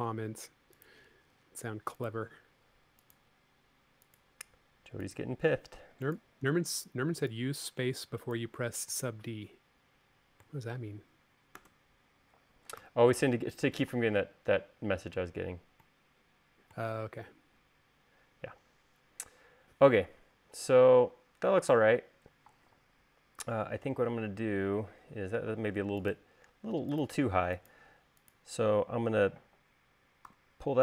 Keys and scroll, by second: 11.8 space, 13.0 u, 23.7 u, 30.5 v.